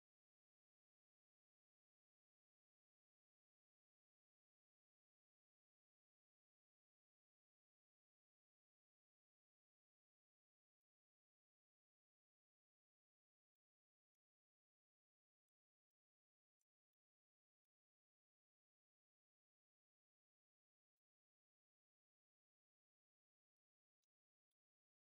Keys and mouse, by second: 23.8-24.3 middle drag, 24.8 shift+z.